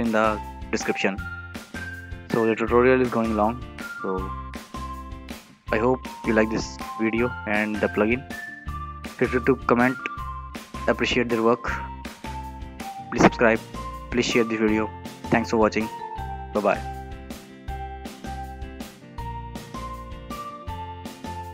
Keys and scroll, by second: 21.1 a.